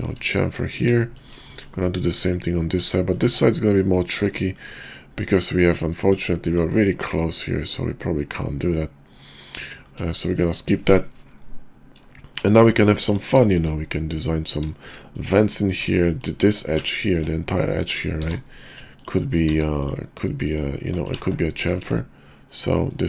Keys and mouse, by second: 0.4 click, 1.0 shift+click, 1.6 click, 3.1 shift+click, 4.8 middle click, 6.5 Tab, 7.4-9.7 middle drag, 10.1 shift+middle drag, 10.5 middle drag, 13.0 KP_5, 13.4 shift+click, 14.7 shift+click, 15.1 click, 15.7 Tab, 17.0-18.0 ctrl+drag, 18.2 w, 19.0 ctrl+click, 19.5 ctrl+z, 21.2 ctrl+z, 21.4 click, 21.8 ctrl+b.